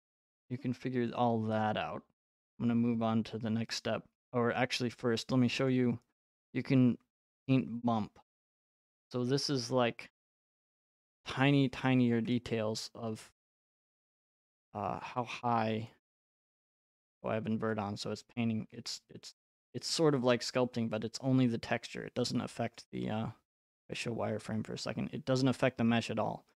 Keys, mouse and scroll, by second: 5.7 click, 8.8-9.8 scroll, 10.1 right click, 11.4 right click, 11.7 scroll, 12.3-12.7 scroll, 15.9 click, 16.8 click, 22.8 right click, 24.0 click.